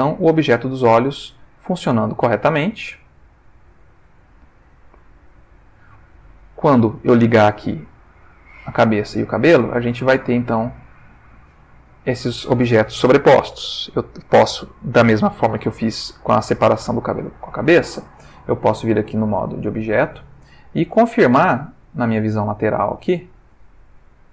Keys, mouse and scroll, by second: 0.3-1.3 ctrl+middle drag, 1.5 ctrl+middle click, 2.4-4.1 ctrl+middle drag, 5.3 click, 6.3 ctrl+middle click, 8.6 click, 9.1 click, 10.2 ctrl+middle click, 17.6 click, 19.1 click, 19.8 click, 20.8-22.0 middle drag, 22.1 middle click, 23.8 click.